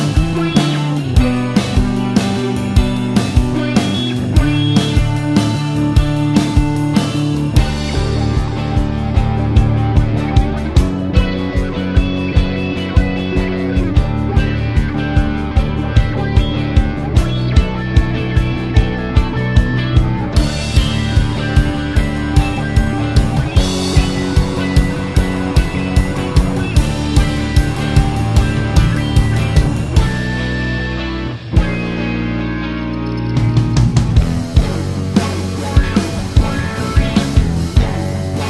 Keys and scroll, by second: 1.6 BackSpace, 8.1 d, 21.9-22.6 typing.